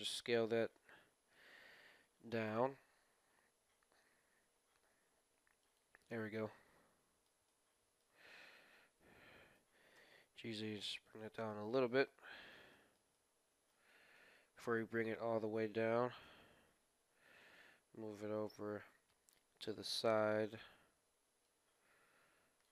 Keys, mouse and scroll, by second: 6.0-9.1 middle drag, 8.4 KP_1, 9.5 g, 11.3-16.0 middle drag, 16.1 KP_1, 17.5-19.2 drag, 21.4-22.7 drag.